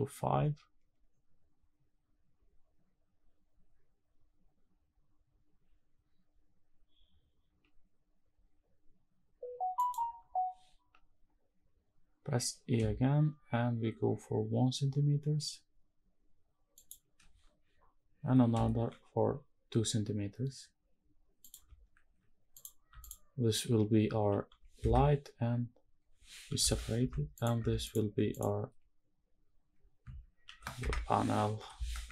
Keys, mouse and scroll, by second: 9.5 shift+click, 16.5 shift+click, 21.1 shift+click, 22.2 click, 22.7 alt+click, 24.0 shift+d, 24.5 Escape, 26.2 p, 26.7 Tab, 27.0 click, 27.3 Tab, 27.5 click, 28.0 alt+click, 30.1 shift+d, 30.5 Escape, 31.3 p, 31.8 Tab.